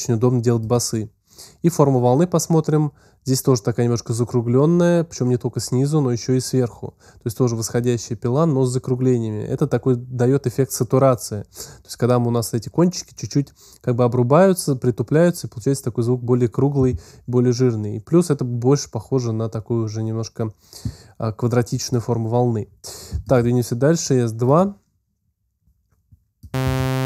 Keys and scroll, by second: 26.5 space.